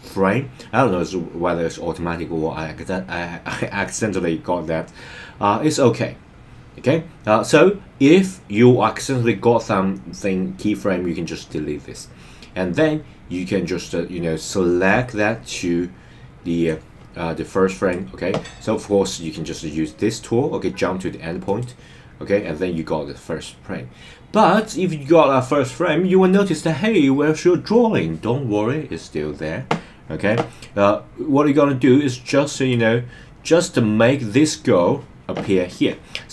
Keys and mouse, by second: 13.4-16.7 drag, 17.7 click, 21.4 click, 32.6 click.